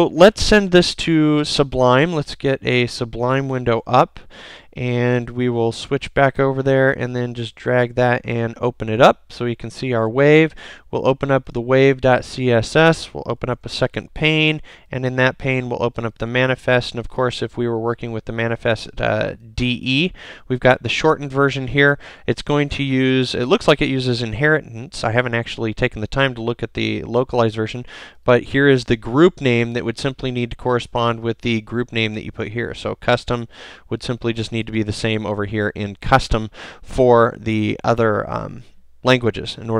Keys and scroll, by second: 1.7 super+Tab, 3.6 shift+super+n, 5.3 super+Tab, 13.4 alt+super+2, 32.5 super+c, 34.5 super+v.